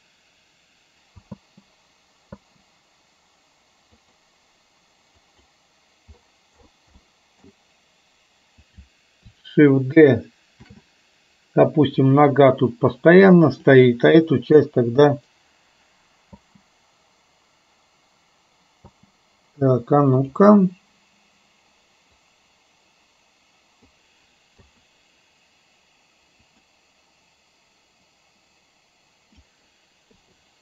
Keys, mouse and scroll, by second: 1.4 space, 4.1 click, 4.1 space, 5.2 click, 7.2 middle click, 8.8 click, 10.8 shift+d, 13.6 click, 14.7 Delete, 16.6 space, 20.3 click, 20.3 space, 22.4-24.1 drag, 26.7 click, 28.2-29.7 drag.